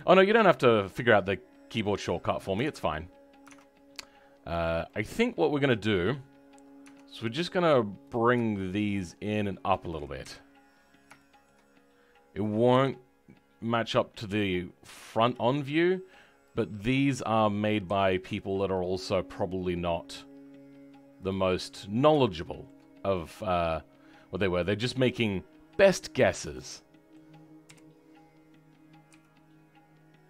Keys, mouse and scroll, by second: 0.0-2.6 middle drag, 3.5 middle click, 4.1 scroll up 2, 4.8-6.0 middle drag, 6.0 click, 10.2 KP_1, 10.6-11.0 scroll up 6, 11.1-12.7 shift+middle drag, 12.7 g, 16.7 click, 17.8 g, 21.8 scroll down 2, 22.2 shift+middle click, 23.0-24.2 scroll up 1, 24.2 scroll down 2, 24.5-26.8 middle drag, 27.6 KP_1, 28.0 scroll up 2, 29.0 g.